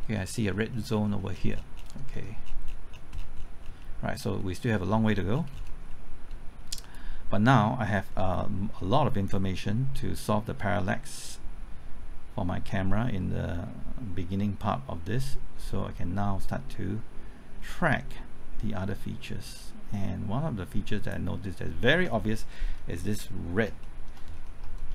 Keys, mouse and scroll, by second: 0.2-0.9 scroll up 1, 1.4 scroll down 1, 2.1 middle click, 2.5-3.8 scroll down 1, 3.8 middle click, 5.3-5.8 scroll down 1, 5.9 middle click, 6.9-21.7 drag, 21.8-22.7 scroll up 1, 22.7-23.0 scroll down 1, 23.0-23.5 scroll up 1, 23.5 scroll down 1, 23.8 shift+middle click, 24.2-24.9 scroll up 3.